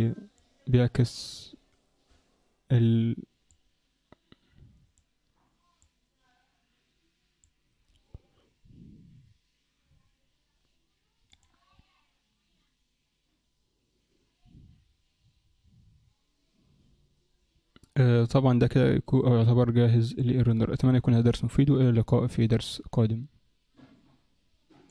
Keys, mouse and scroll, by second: 2.3-2.7 scroll down 4, 3.7 click, 6.1 click, 11.3 click, 20.1 click.